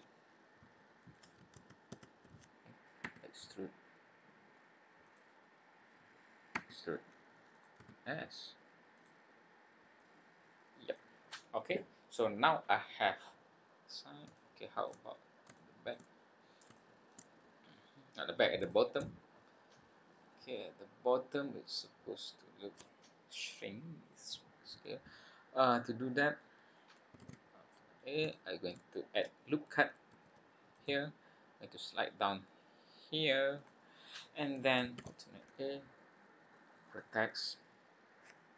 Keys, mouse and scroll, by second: 1.5 ctrl+z, 1.9 ctrl+z, 3.0 e, 6.5 e, 7.8 s, 10.1 click, 11.3-12.4 scroll down 10, 12.9-13.4 scroll down 3, 13.5-14.3 scroll up 4, 14.3 shift+middle click, 15.0 scroll up 2, 15.5 shift+middle click, 16.1 scroll up 1, 16.7 shift+middle click, 17.3 scroll up 1, 17.8 scroll down 1, 18.7 shift+middle click, 19.1 scroll up 1, 20.1-20.6 scroll down 6, 21.0-21.4 scroll up 3, 21.6 scroll down 2, 21.9-22.4 scroll up 3, 26.3-27.1 scroll down 3, 27.2 alt+a, 27.6-28.0 scroll up 4, 28.3 shift+middle click, 30.1 ctrl+r, 35.0 alt+a, 36.9 click.